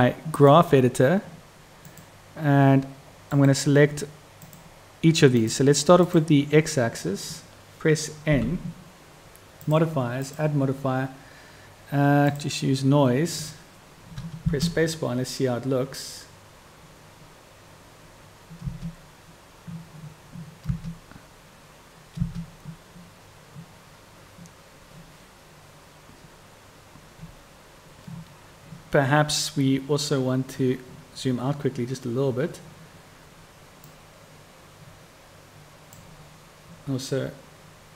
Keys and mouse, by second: 14.6 space, 18.9 space, 22.4 space, 34.1-37.9 drag.